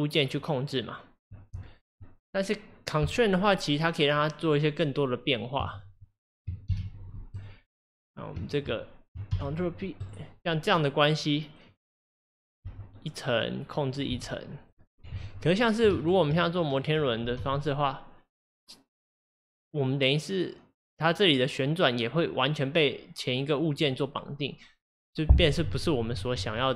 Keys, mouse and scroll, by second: 0.4 click, 5.7 shift+click, 6.7 ctrl+p, 8.0 click, 8.5 shift+click, 9.3 ctrl+p, 10.7 click, 11.7 click, 12.6 g, 13.9 click, 14.2 g, 15.2 ctrl+z, 15.9 ctrl+z, 16.6 click, 17.4 r, 23.8 click, 26.4 ctrl+z.